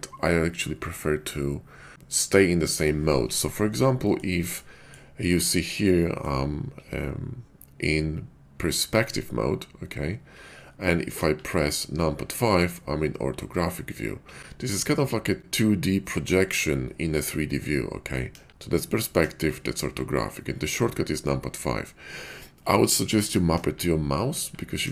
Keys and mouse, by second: 3.9 middle click, 4.6-5.0 shift+middle drag, 5.7-6.3 shift+middle drag, 11.0 KP_5, 18.3 KP_5, 19.2 KP_5, 23.5-24.9 typing.